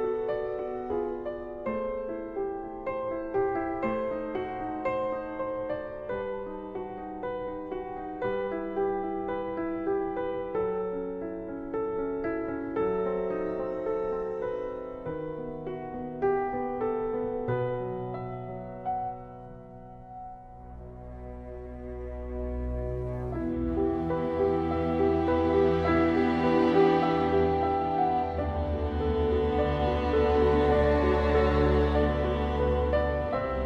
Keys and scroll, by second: 0.0 ctrl+z, 2.6 ctrl+z, 3.0 ctrl+z, 4.1 ctrl+z, 4.7 ctrl+z, 6.8 ctrl+z, 8.0 ctrl+z, 9.2 ctrl+z, 9.6 ctrl+z, 10.5 ctrl+e, 13.3 ctrl+z, 14.7 ctrl+shift+z, 16.6 ctrl+z, 17.8 ctrl+z, 18.1 ctrl+s, 19.1 ctrl+z, 19.3 ctrl+z, 21.6 ctrl+z, 22.0 ctrl+z, 24.5 ctrl+z, 25.1 ctrl+z, 25.5 ctrl+z, 25.8 ctrl+z, 26.1 ctrl+z, 28.0 ctrl+z, 28.6 ctrl+z, 29.0 ctrl+s, 30.3 ctrl+z, 30.9 ctrl+z, 31.1 ctrl+z.